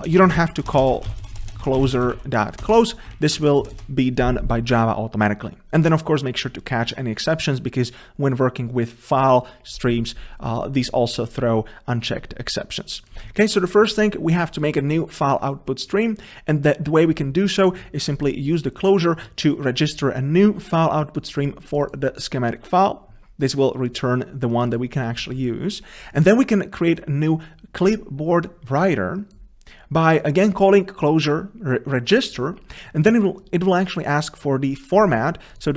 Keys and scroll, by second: 2.8 Return.